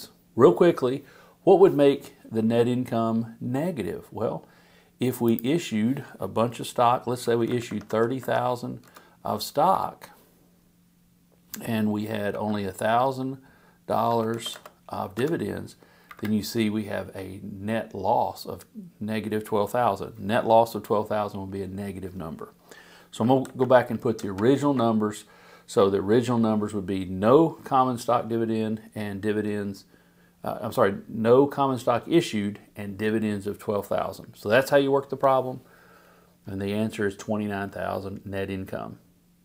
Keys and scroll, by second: 7.2 3, 7.5 0, 8.8 Return, 9.7 Down, 12.3 i, 14.1 0, 15.1 Return, 16.0 Up, 23.4 super+z.